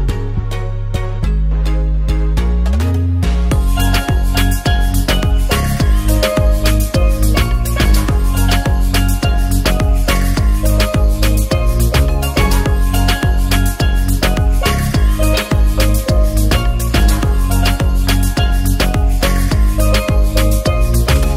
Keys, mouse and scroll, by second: 0.4 drag, 1.2 ctrl+s, 2.7 alt+middle click, 5.4-6.1 alt+middle drag, 6.4 click, 8.0-9.2 drag, 10.3 ctrl+s, 10.9 drag.